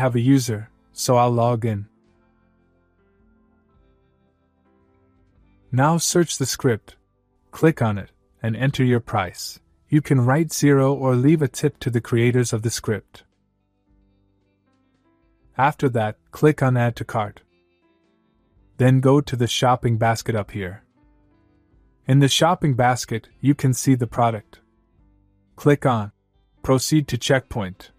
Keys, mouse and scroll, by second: 1.4 click, 4.1 click, 4.5-5.6 typing, 7.8 click, 12.3 click, 14.5 click, 16.0 click, 19.1 click, 25.5 click, 27.7 click.